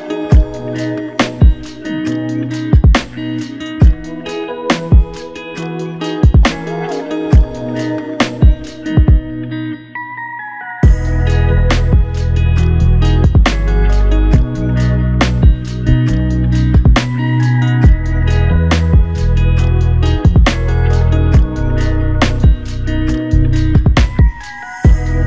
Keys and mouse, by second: 1.6 shift+click, 3.1 shift+click, 3.7 f, 4.8 shift+click, 6.9 ctrl+alt+click, 8.1 alt+click, 9.3 ctrl+alt+click, 10.4 typing, 14.2 shift+click, 15.8 alt+click, 16.9 alt+shift+click, 19.1 double click, 19.7 shift+click, 21.2 alt+click, 23.0 ctrl+click, 24.3 shift+click.